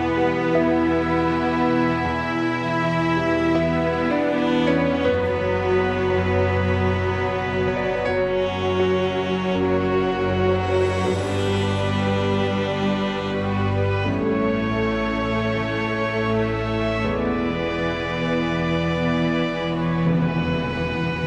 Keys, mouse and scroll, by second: 1.9 Tab, 2.3 click, 4.3 x, 6.1 click, 7.4 x, 8.7 click, 9.9 click, 11.2 x, 12.1 click, 12.8 Tab, 13.3-15.1 middle drag, 15.8 click, 16.4 click, 16.9 Tab, 18.0-20.2 drag.